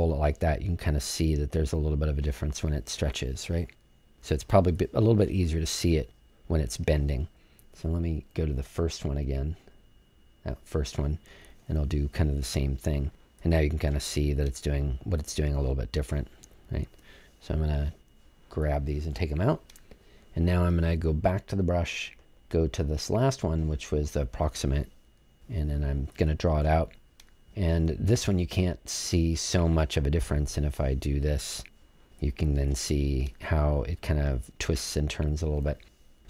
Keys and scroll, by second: 19.1 BackSpace.